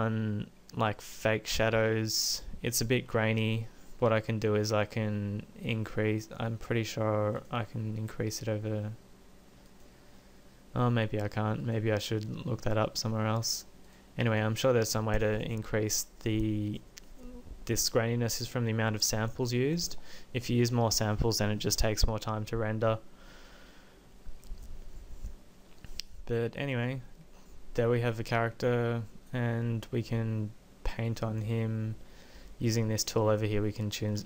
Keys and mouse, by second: 2.9-9.8 drag, 16.3 click, 31.3-33.5 drag, 33.9-34.2 middle drag.